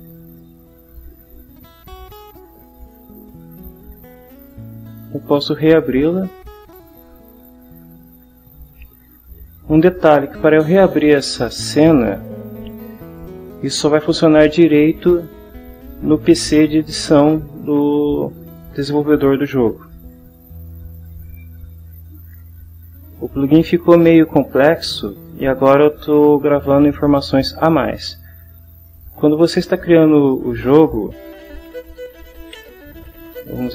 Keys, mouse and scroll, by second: 4.5 click, 6.3-7.0 drag, 20.5 click, 21.7 click, 29.6 click, 32.6 ctrl+t.